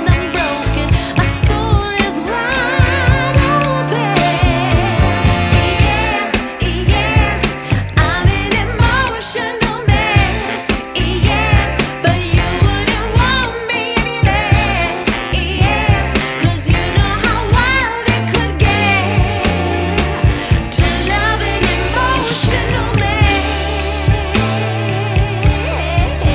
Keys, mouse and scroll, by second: 0.7 click, 10.8 click, 16.5-17.3 scroll up 4, 17.3-19.4 scroll down 3, 19.8 click, 21.4-22.7 scroll down 3, 23.4 click, 23.5 F10, 25.7 scroll down 1, 25.7 scroll up 1, 25.9 scroll down 1, 26.0 scroll down 2, 26.2 scroll up 2.